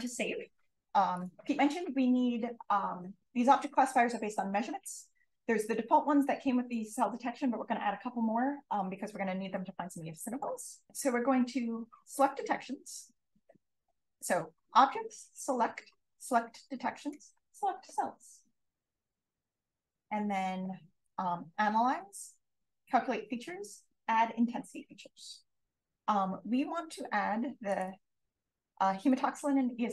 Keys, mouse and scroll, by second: 0.7 shift+f, 10.1 click, 27.6 click, 28.3 click, 28.9 click.